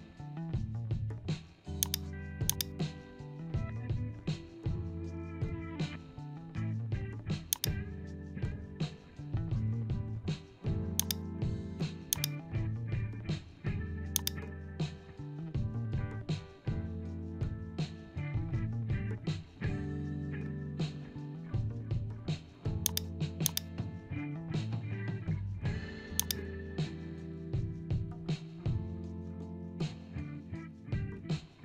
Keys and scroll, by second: 26.9 ctrl+g.